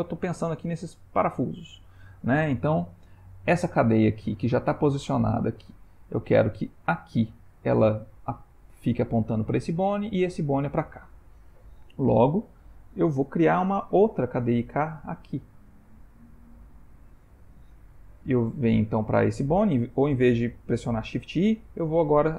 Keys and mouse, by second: 15.9 click, 21.1 shift+i.